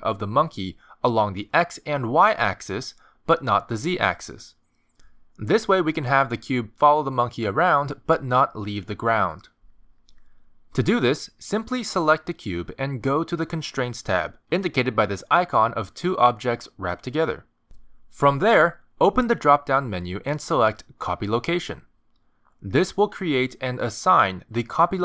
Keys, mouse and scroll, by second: 7.5 click, 8.0 g, 18.1 click, 20.2 click.